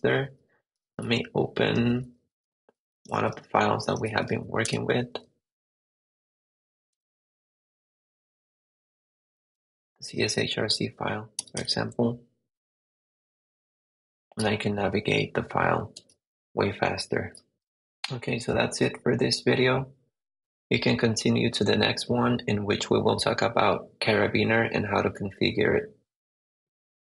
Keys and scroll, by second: 0.0-1.6 typing, 3.1 j, 3.7 j, 4.1 k, 4.6 Return, 5.0 j, 6.9 Return, 8.0 j, 9.3 j, 9.8 Return, 10.2 j, 11.5 Return, 13.2 j, 14.4 k, 16.0 j, 17.4 j, 17.5 super+Tab.